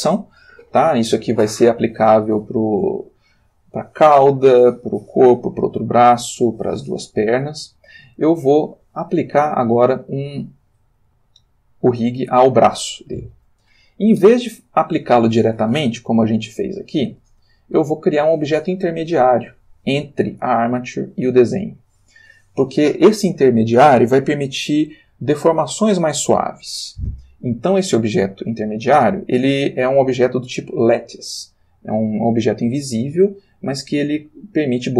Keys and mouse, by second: 6.0 shift+middle click, 7.3 shift+middle click, 8.4 ctrl+shift+middle click, 9.8 click, 16.4-16.9 drag, 17.2 r, 17.9 Escape, 20.4 click, 21.3 click.